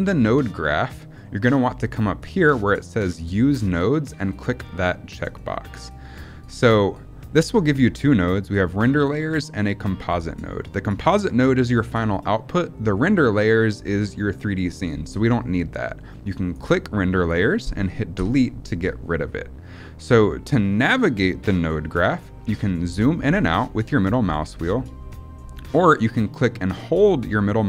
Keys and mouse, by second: 5.0 click, 16.4 click, 18.0 Delete, 26.3-27.6 middle drag.